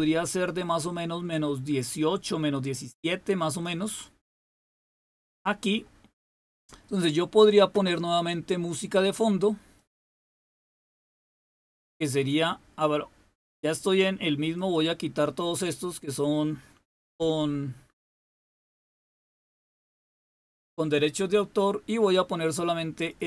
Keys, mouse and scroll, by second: 9.7 click, 10.4 click, 14.5-17.3 drag, 17.3 Delete, 18.2 Delete, 19.1 Delete, 19.6 Delete, 20.3 Delete, 22.9-23.2 drag.